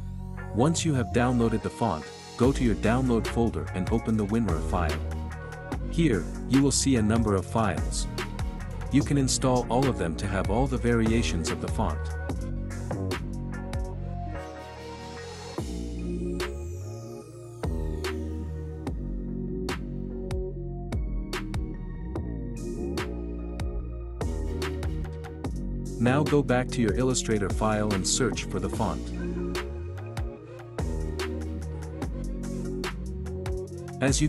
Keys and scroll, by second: 32.4-34.2 typing.